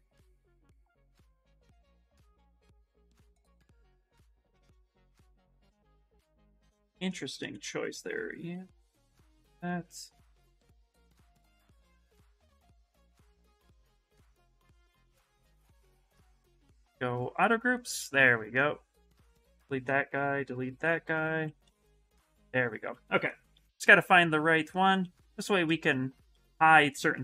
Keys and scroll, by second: 7.1 ctrl+z, 12.3 ctrl+z, 13.1 x, 16.3 2, 21.1 ctrl+w, 23.4 shift+f.